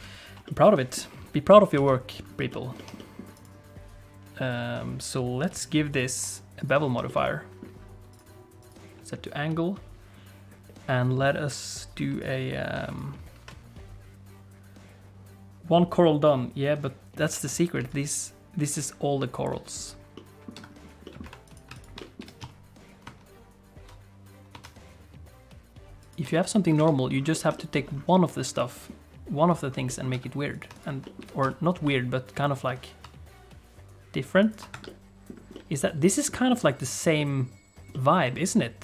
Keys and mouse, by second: 0.5 middle click, 1.8 alt+a, 2.5 shift+click, 2.8 shift+middle click, 3.0 middle click, 5.5 click, 6.0 click, 7.1 shift+middle click, 7.2 middle click, 8.1 click, 12.2 click, 18.0-19.3 shift+drag, 20.1 middle click, 20.5 Tab, 21.0 middle click, 21.2 1, 22.0 middle click, 22.2 g, 26.3 middle click, 26.8 Tab, 27.3 middle click, 27.6 middle click, 28.6 middle click, 29.9 middle click, 30.1 Tab, 30.5 click, 31.0 middle click, 31.2 g, 34.7 Tab, 34.8 middle click, 35.5 middle click, 36.3 middle click, 37.2 middle click, 37.9 middle click.